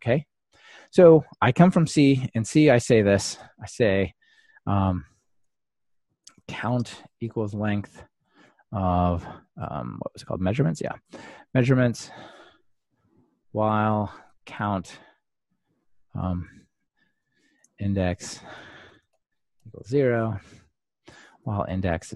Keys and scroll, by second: 4.7 Escape, 6.5 Escape, 12.1 Return, 16.4 ctrl+alt+shift+Left, 21.1 ctrl+alt+shift+Left.